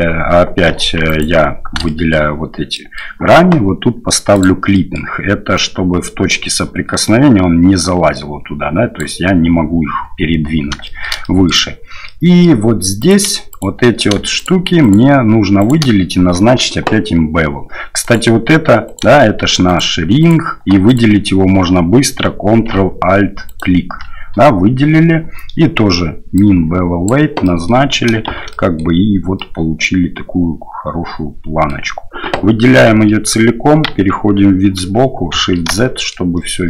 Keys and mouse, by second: 1.1 alt+right click, 1.8 shift+middle click, 2.7 middle click, 4.4 click, 4.7 middle click, 5.6-9.0 drag, 11.0 shift+middle click, 11.4 middle click, 12.2 middle click, 13.0 right click, 13.5 right click, 14.4 shift+right click, 14.8 shift+right click, 15.6 shift+right click, 18.0 right click, 18.9 right click, 19.7 shift+right click, 20.2 shift+right click, 20.9 right click, 23.5 ctrl+alt+right click, 26.4 click, 27.4 middle click, 28.3 shift+z, 28.5 middle click, 29.3-31.7 drag, 33.9 KP_3, 35.3 shift+z, 35.9 shift+click.